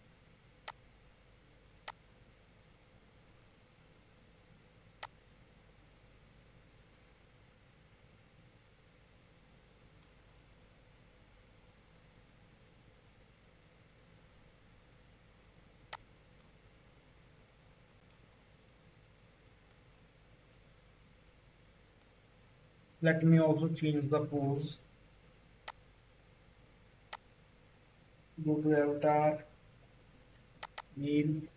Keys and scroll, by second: 24.5 2.